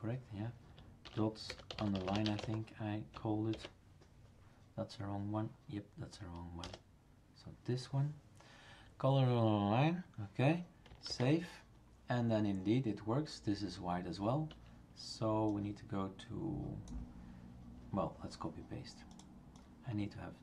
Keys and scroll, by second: 1.0-3.5 typing, 6.6 BackSpace, 11.1 ctrl+s.